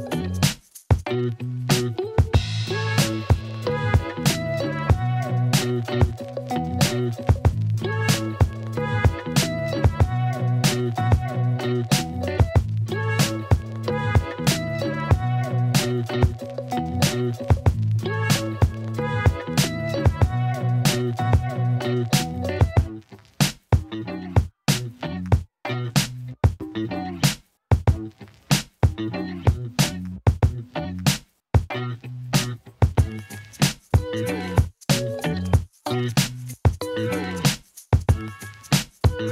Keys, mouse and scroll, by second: 0.7-2.0 middle drag, 2.1 ctrl+alt+middle click, 2.5 g, 2.6 y, 3.2 alt+middle click, 4.0 y, 5.2-6.3 alt+drag, 6.8 3, 7.6 e, 10.0 a, 10.3 2, 11.1 ctrl+b, 14.3 click, 15.7 3, 15.8 click, 16.4 alt+middle click, 17.6 middle click, 18.3 2, 19.0 ctrl+b, 24.3 Tab, 24.7 alt+middle click, 25.0-25.3 alt+drag, 25.3-25.8 alt+middle drag, 26.2-26.5 drag, 27.7 alt+middle click, 28.0 alt+click, 28.5 Tab, 29.4 click, 30.6 click, 31.7 click, 32.3 middle click, 33.1-34.5 drag, 34.5 KP_3, 34.7 ctrl+r, 37.2 ctrl+r.